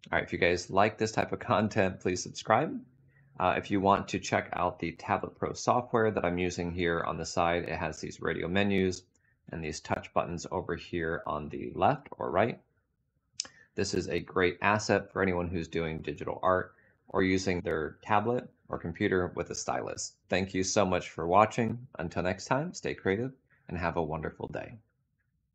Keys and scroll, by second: 9.0 F7, 11.6 Tab.